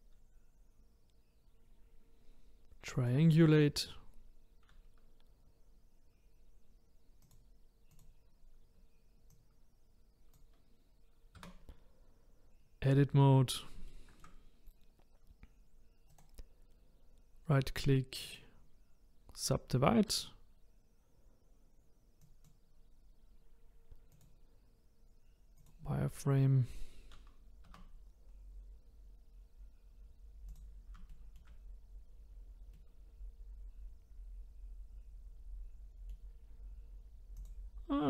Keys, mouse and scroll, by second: 7.2-9.4 drag, 11.4 Tab, 13.4-13.9 scroll up 2, 13.9-16.1 shift+middle drag, 16.1-22.2 right drag, 22.2 click, 24.1-27.2 drag, 27.7 Tab, 28.3-29.0 scroll up 2, 29.0-30.5 scroll down 1, 30.5 click, 31.1-31.7 shift+middle drag, 31.7-32.7 scroll down 1, 32.7-35.7 middle drag, 37.4 click, 37.9-38.0 scroll up 1.